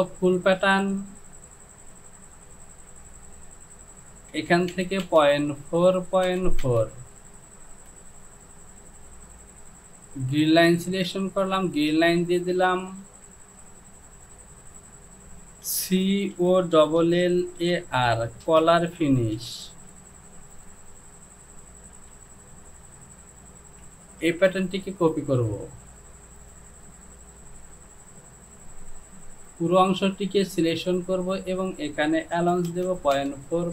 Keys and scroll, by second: 4.7 Down, 5.1 Down, 6.6 Down, 7.7 Down, 16.8-19.9 typing, 22.0 j, 24.3 ctrl+c, 32.5 Down, 32.7 Down, 33.2 Down.